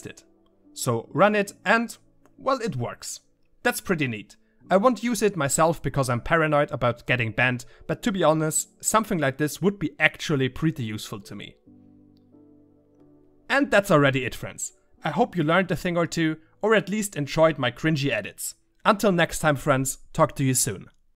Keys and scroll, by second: 0.6 2, 2.8 3, 3.8 \, 4.8 5, 7.0 \.